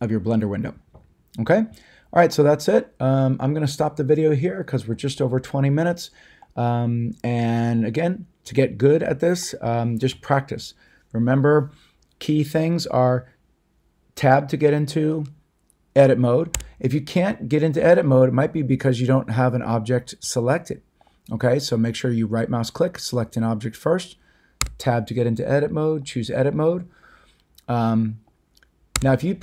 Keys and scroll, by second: 16.5 Tab, 24.6 Tab, 28.9 Tab.